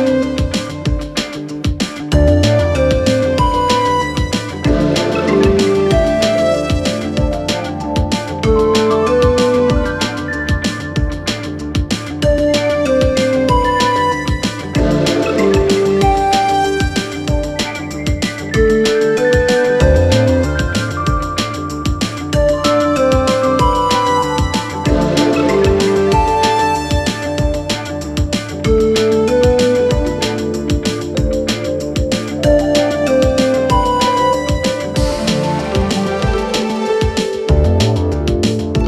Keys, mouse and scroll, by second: 4.2 [, 5.6-9.2 click, 10.3 alt+], 11.2-17.7 click, 19.4-20.6 click, 30.6-31.9 click, 32.4-33.7 click, 34.1-35.2 click.